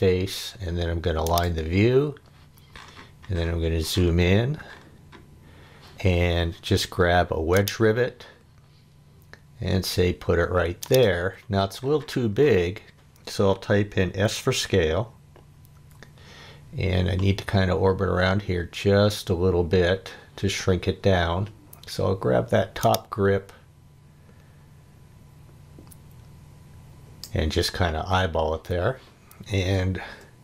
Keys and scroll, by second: 15.7 s.